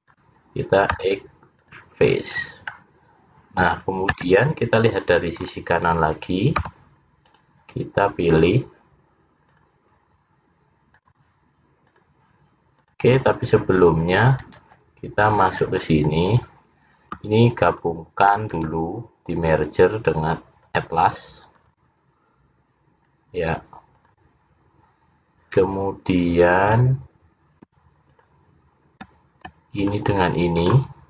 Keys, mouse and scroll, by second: 1.0 x, 2.4-2.9 scroll down 3, 2.8 middle click, 4.3 `, 5.6-6.1 scroll up 6, 6.7 c, 15.4 click, 16.3 click, 17.7 shift+click, 18.3 shift+click, 18.6 right click, 21.6 click, 23.1 scroll up 1, 24.0 click, 26.8 click, 28.2 shift+click, 28.3 shift+click, 30.2 shift+click, 30.8 shift+click.